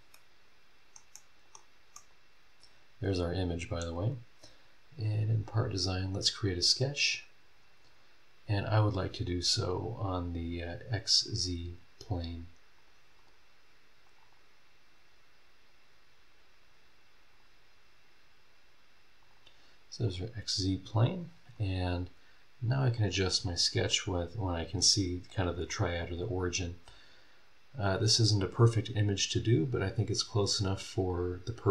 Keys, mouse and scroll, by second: 0.1 middle click, 1.1 scroll up 1, 1.1 middle click, 1.4 click, 1.9-4.0 middle drag, 2.1-4.0 drag, 4.0 scroll down 1, 4.6 scroll up 1, 5.4 click, 12.8 click, 13.2 click, 14.0 click, 17.3 click, 19.2 click, 20.1 click, 21.2 scroll up 1, 21.5 scroll down 1, 22.9 click, 25.8 scroll up 1, 26.3 scroll down 1.